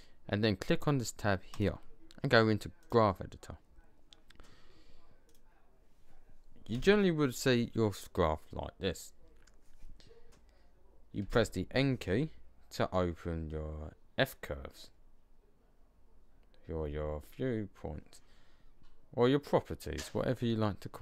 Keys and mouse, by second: 5.0 click, 6.3 click, 6.6 n, 11.1 n.